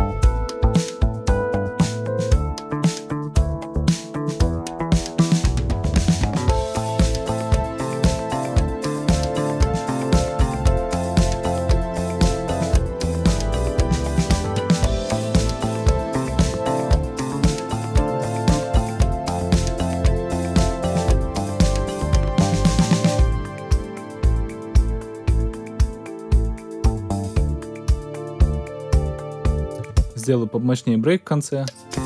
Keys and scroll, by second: 29.7 space.